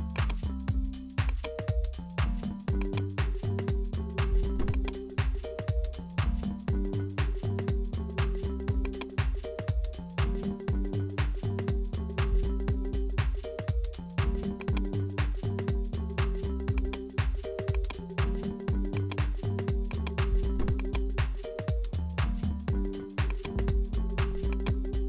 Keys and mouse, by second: 2.8 click, 3.7 Tab, 4.7 click, 8.0 click, 13.1 Tab, 13.6 Tab, 14.6 click, 15.8-18.4 drag, 18.4 s, 19.8 click, 20.8 click, 21.5 s, 24.4-25.0 drag.